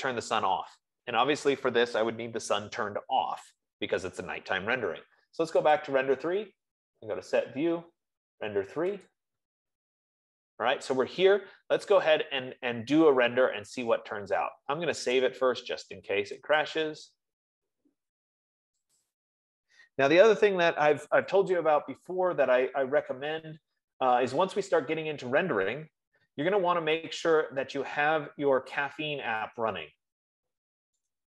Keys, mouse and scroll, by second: 0.1 click, 6.3 click, 9.6 click, 15.7 click, 17.2 click, 19.6 click, 24.4 click, 27.7 click, 28.4-29.4 drag, 31.2 click.